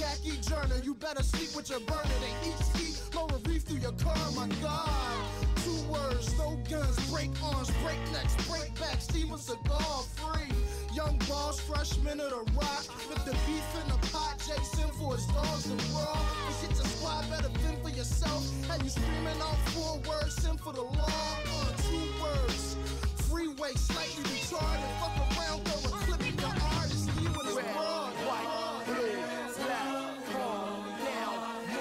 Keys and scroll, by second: 4.6 space, 13.2 space, 14.6 space, 15.7 space, 23.1 space, 30.2 space.